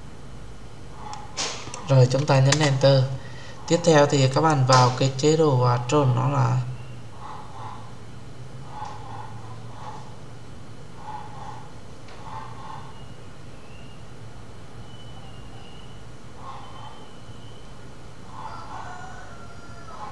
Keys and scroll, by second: 2.4 Return.